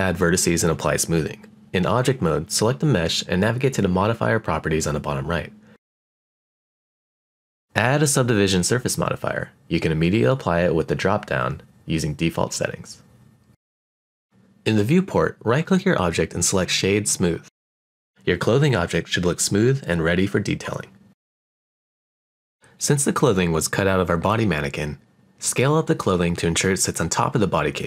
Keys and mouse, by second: 1.1-2.1 drag, 3.0 click, 3.7 click, 16.4-19.3 right drag, 19.9-20.2 middle drag, 20.6-21.9 middle drag, 22.8 click, 23.4-24.7 shift+middle drag, 26.0 click, 27.7 click.